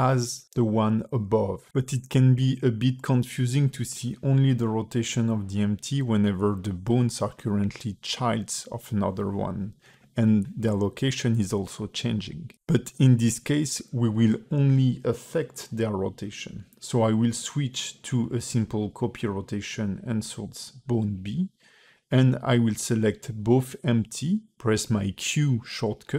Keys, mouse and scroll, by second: 0.5 click, 1.6 space, 6.1 space, 7.0 click, 8.1 click, 11.3 click, 12.9 click, 14.1 click, 16.4 click, 19.1 click, 20.7 space, 24.0 space, 25.5 shift+click.